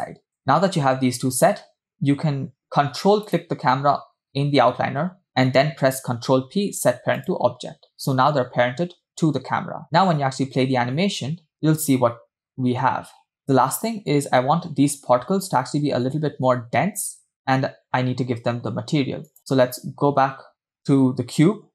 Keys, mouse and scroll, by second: 3.3 ctrl+click, 6.3 ctrl+p, 10.1 space, 12.0 space, 12.5 click, 12.5 space, 14.7 space, 19.3 click.